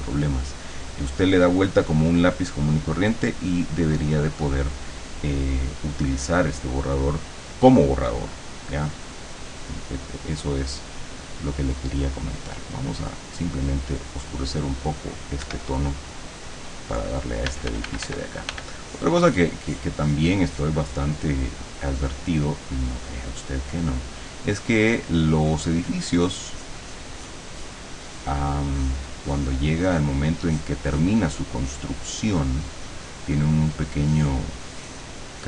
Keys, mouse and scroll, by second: 4.0 click, 11.0 click, 12.5-14.5 drag, 15.5 Escape, 16.1 click, 17.5 f, 18.9-21.3 drag, 21.7-25.3 drag, 25.5 click, 28.8 click, 30.5 click, 31.0 click, 32.1-33.4 drag, 33.5-35.3 drag.